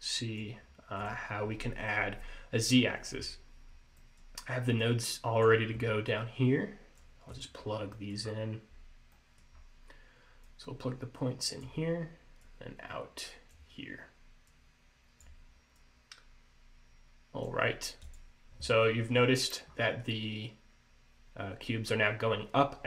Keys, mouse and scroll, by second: 0.7-1.1 scroll down 2, 1.1 click, 3.8 scroll down 3, 4.1 middle click, 4.9 click, 6.2 click, 7.4 click, 8.0 middle click, 8.4-9.1 scroll up 3, 9.2 middle click, 9.7-10.1 scroll up 1, 10.6 click, 12.5 click, 14.6 click, 15.9 click, 18.2 click, 19.0 middle click, 19.8-20.2 scroll up 2.